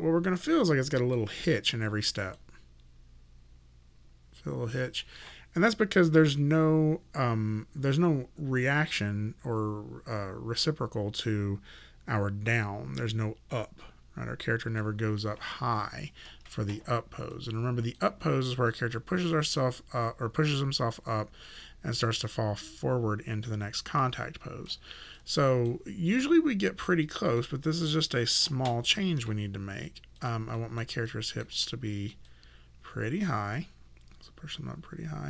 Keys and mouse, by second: 2.2 click, 4.7 click, 17.3 click, 24.0 click, 25.2 alt+click, 27.3 click, 30.2 click, 31.1 alt+right click, 32.3 click.